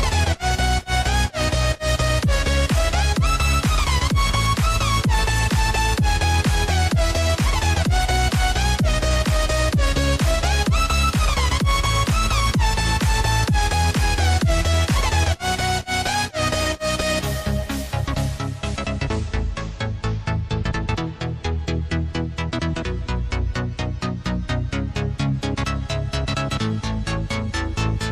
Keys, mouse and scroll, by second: 3.2 click, 5.6 click, 8.1 click, 10.6-13.7 drag, 13.9 click, 15.3 click, 15.7-16.7 scroll down 2, 16.7 click, 18.1 click, 18.6-20.0 scroll down 2, 20.0 click, 22.1 click, 23.3 click, 25.5 click, 26.1 click.